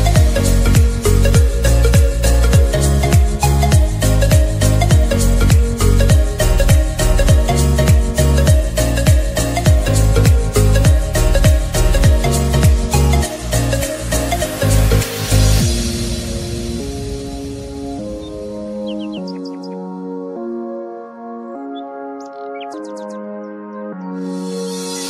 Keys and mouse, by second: 2.1 click, 6.9 click, 12.5-18.5 drag, 18.5-23.7 alt+drag.